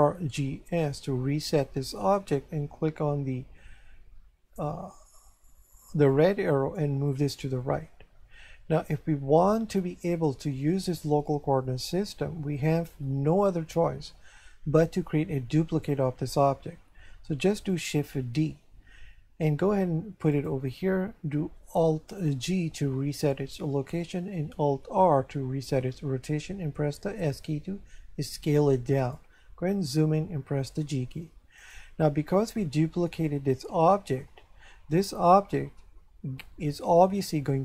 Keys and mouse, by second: 0.2 alt+g, 0.7 alt+s, 6.1 click, 18.3 shift+d, 20.3 click, 22.4 alt+g, 25.0 alt+r, 27.0 s, 29.0 click, 30.8 g, 31.6 click.